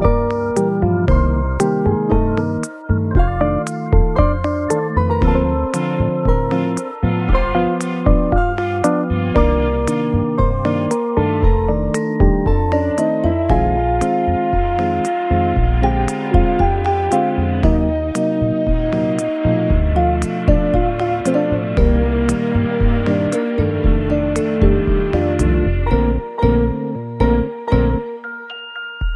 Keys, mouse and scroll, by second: 0.0 shift+click, 2.1 shift+click, 2.2 shift+click, 2.7 shift+click, 4.4 middle click, 8.0 shift+d, 9.7 y, 11.3 scroll down 2, 12.4 middle click, 12.5 scroll up 3, 16.4 shift+click, 17.0 shift+click, 17.0-17.4 scroll down 1, 17.5 g, 17.8 y, 19.5 KP_3, 21.0 g, 22.5 y, 25.3 double click, 25.6 scroll down 2, 26.3 middle click, 26.9-27.4 scroll up 2, 27.5 shift+middle click.